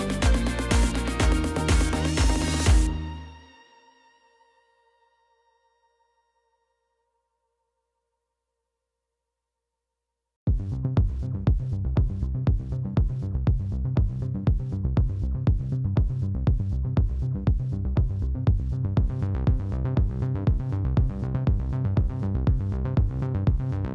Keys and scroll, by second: 0.9 ctrl+b, 0.9 ., 1.0 0, 1.1 Return, 1.5 3, 2.5 b, 2.6 e, 2.7 r, 2.9 Return, 3.3 x, 3.7 ctrl+v, 6.3-9.3 typing, 14.3 s, 14.8 Tab, 19.3-19.9 typing, 20.2 Return, 20.9 Tab, 21.9-22.4 typing, 22.7 Return.